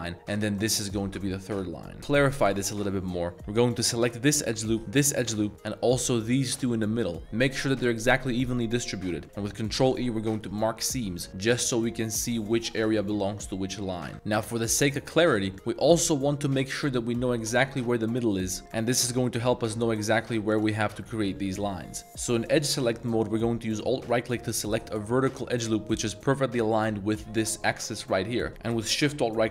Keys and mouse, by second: 0.5 alt+shift+click, 2.0 2, 2.6 middle click, 3.8 alt+click, 4.9 alt+shift+click, 5.8 alt+shift+click, 9.5 ctrl+e, 11.2 a, 11.3 a, 12.0 middle click, 12.5 3, 13.8 middle click, 14.0 a, 14.6 middle click, 14.9-15.3 middle drag, 15.8 middle click, 16.1 middle click, 18.2-18.5 middle drag, 19.3 click, 20.5 ctrl+shift+click, 21.3 a, 21.4 a, 22.0 2, 24.4 alt+click, 25.3 middle click, 25.7 shift+middle drag, 26.0 middle click, 28.4 middle click.